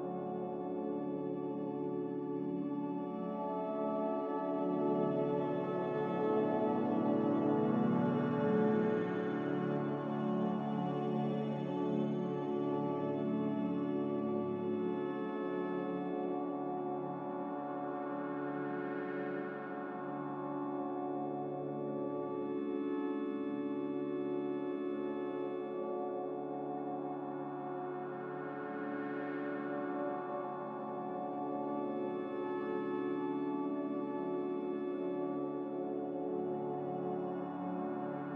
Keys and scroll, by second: 3.4 Delete, 11.7 Escape, 12.9 z, 14.9 typing, 15.3 Return, 17.6 5, 24.5 typing, 26.1-26.8 typing, 29.7 5.